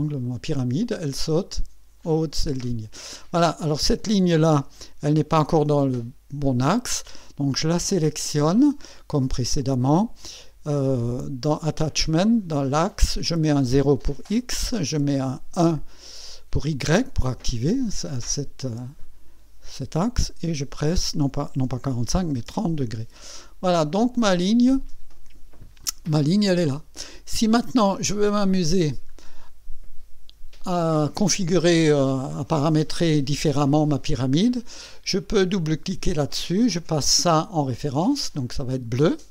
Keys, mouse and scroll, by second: 2.2 click, 3.4 click, 4.7 KP_2, 8.0 click, 9.7 click, 12.3 click, 13.2 click, 14.1 KP_0, 15.0 click, 15.5 KP_1, 18.8 click, 20.5 KP_4, 21.7 BackSpace, 22.2 BackSpace, 22.5 KP_0, 23.6 click, 24.1 click, 25.8 click, 27.9 click, 35.7 click, 37.3 click, 38.3 click.